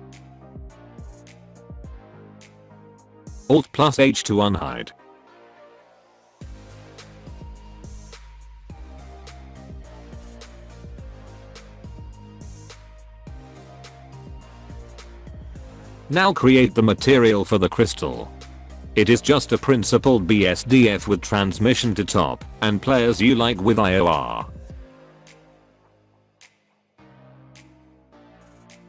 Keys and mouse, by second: 0.4 middle click, 1.6 middle click, 3.7 alt+h, 5.1 alt+a, 5.5-6.1 middle drag, 6.2 middle click, 7.6 click, 8.3-9.6 middle drag, 14.0 Tab, 14.2 shift+middle click, 14.4 shift+middle click, 14.6 middle click, 14.7 shift+middle click, 14.8 middle click, 15.2 click, 16.1 z, 16.6 alt+a, 18.6 click, 19.1 click, 19.7 click, 20.0 click, 20.4 middle click, 21.5 click, 23.2 click, 23.9 click, 24.7 click, 26.3 click, 26.9 alt+a.